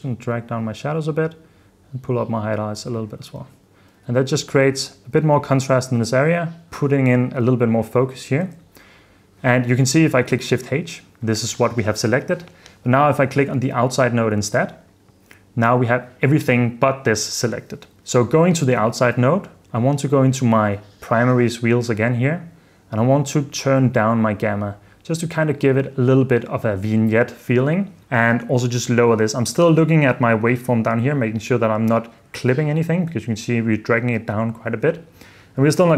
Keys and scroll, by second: 3.5 super+d, 4.3 super+f, 4.8 super+d, 5.9 super+d, 7.7 super+d, 8.2 super+f, 8.5 super+s, 10.7 h, 18.0 h, 32.5 super+d, 33.1 super+d, 34.8 super+s.